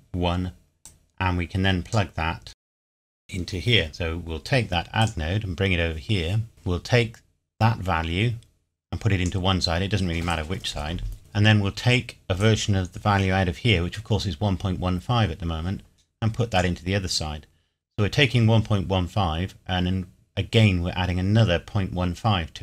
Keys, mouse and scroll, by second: 0.9 click, 3.9 shift+d, 5.0 click, 12.4 click.